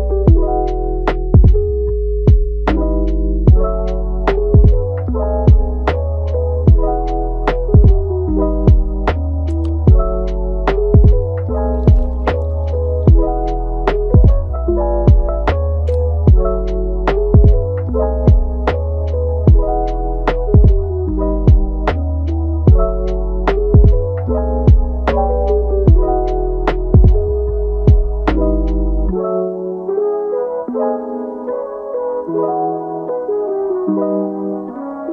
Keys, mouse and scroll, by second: 0.4 scroll down 3, 0.7-2.7 middle drag, 2.7 click, 3.3 scroll down 1, 3.5-4.9 middle drag, 4.9 scroll up 1, 5.0-7.6 middle drag, 7.6-8.6 drag, 8.6 Tab, 9.9-11.7 drag, 11.7-12.1 scroll down 1, 12.1-12.8 middle drag, 12.8-13.3 scroll up 4, 13.3-14.8 middle drag, 14.8-17.8 right drag, 20.0-20.6 scroll down 8, 20.6 scroll up 1, 21.4 s, 22.8-23.1 scroll up 3, 23.1 shift+middle click, 24.2 shift+a, 27.8-28.5 scroll down 3, 28.5 g, 32.2 scroll up 4, 32.5 middle click, 33.1 click, 34.2 a, 34.6-35.1 middle drag.